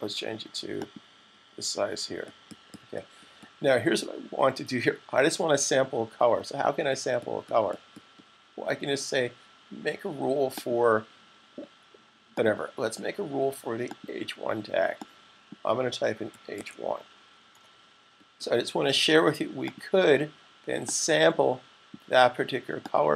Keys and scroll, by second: 15.9-16.8 typing.